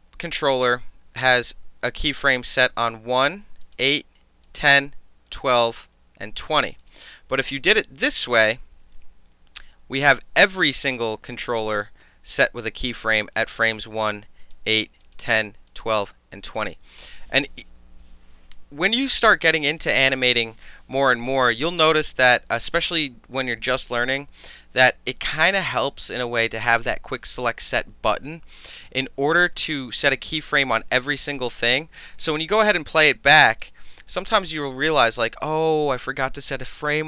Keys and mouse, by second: 2.8 click, 2.9 middle click, 3.6 click, 3.7-4.5 middle drag, 4.5 click, 4.6-5.3 middle drag, 5.3 click, 5.4 middle click, 6.4 click, 6.5 middle drag, 6.8 click, 8.1 click, 10.5 click, 13.6 click, 14.4 click, 15.0 click, 15.7 click, 16.5 click, 33.6-36.5 drag.